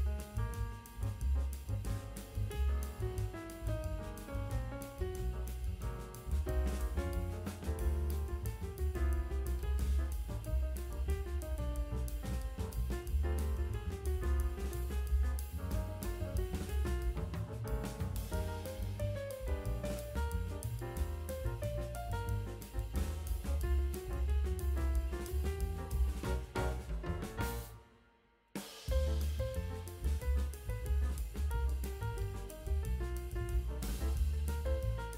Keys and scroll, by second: 1.8 F9, 3.6 space, 4.0 [, 8.3 space, 10.8 space, 12.2 space, 13.1 ], 13.5 space, 14.6 space, 15.6 space, 19.4 space, 20.3 space, 24.1 ], 26.2 ], 28.4 [, 30.1 ].